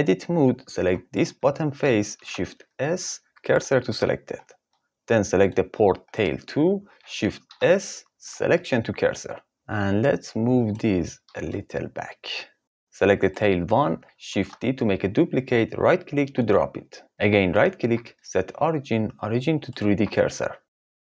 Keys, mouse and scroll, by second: 0.8 3, 2.1 shift+s, 3.8 Tab, 7.4 shift+s, 9.5 ctrl+z, 9.5 g, 11.0 g, 12.6 click, 14.3 shift+d, 16.3 click, 17.8-21.1 drag.